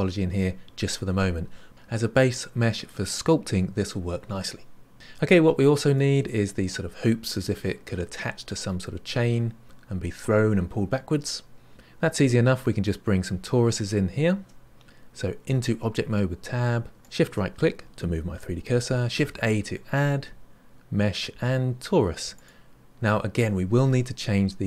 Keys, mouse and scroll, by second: 4.9 middle click, 5.5-5.9 scroll down 3, 5.9-8.9 middle drag, 15.5 Tab, 17.0 shift+right click, 19.2 shift+a.